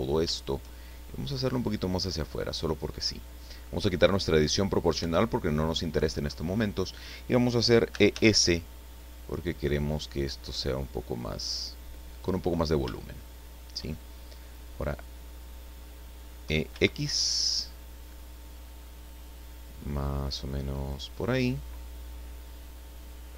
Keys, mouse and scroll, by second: 1.5-3.0 drag, 5.0 o, 7.9 e, 8.1 s, 12.1 click, 12.5-13.1 scroll down 2, 13.1 shift+click, 13.8 shift+middle click, 16.4 e, 16.7 x, 20.7 click.